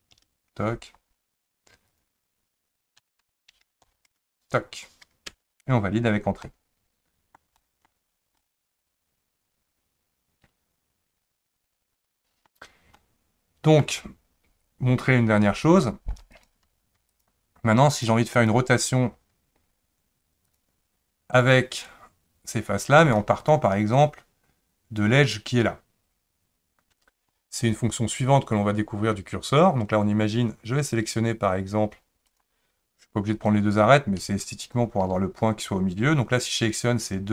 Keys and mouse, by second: 1.9 click, 3.0 s, 6.4 middle click, 7.6 shift+middle click, 8.4-12.5 middle drag, 13.0 middle click, 16.4 click, 17.1 shift+click, 18.4 shift+click, 20.5 click, 21.9-23.0 drag, 32.3 click, 33.4 click, 34.6 shift+click.